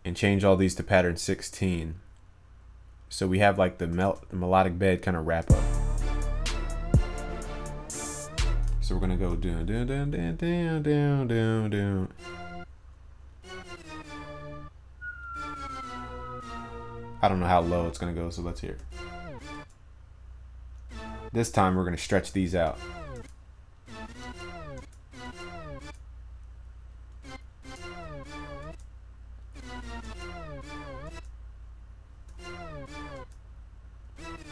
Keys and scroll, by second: 4.1 ctrl+s.